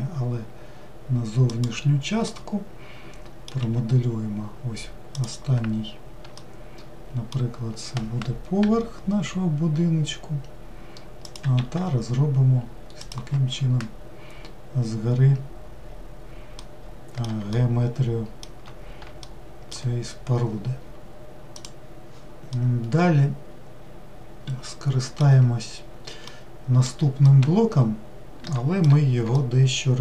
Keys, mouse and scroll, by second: 2.3-3.6 middle drag, 3.6 e, 6.4-8.6 shift+middle drag, 14.8-16.6 scroll down 1, 16.6-21.6 middle drag, 22.6-25.6 middle drag, 26.3-30.0 middle drag.